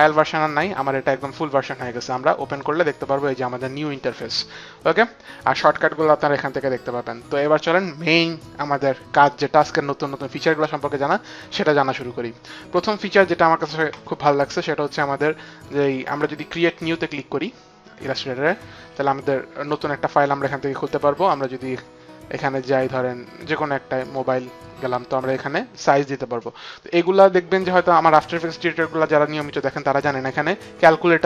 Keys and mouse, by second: 2.4 click, 16.7 click, 23.9 click, 26.6 click.